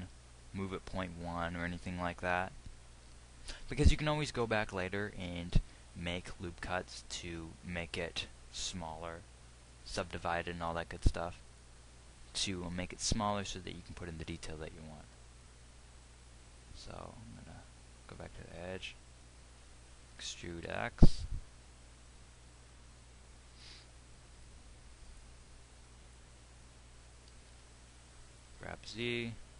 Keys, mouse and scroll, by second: 20.9 e, 27.8 g.